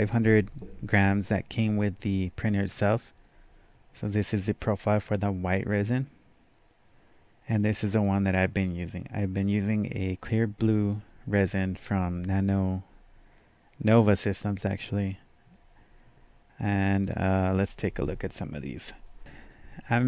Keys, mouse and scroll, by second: 7.8-17.0 drag, 17.0-19.2 drag.